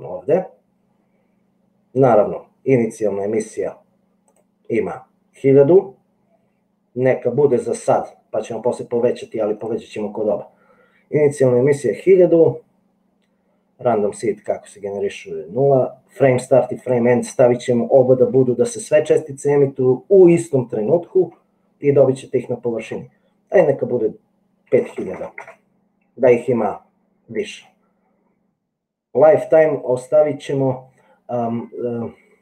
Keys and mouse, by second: 4.5-9.8 drag, 17.0-21.0 drag, 23.9-26.2 drag, 25.0 KP_0.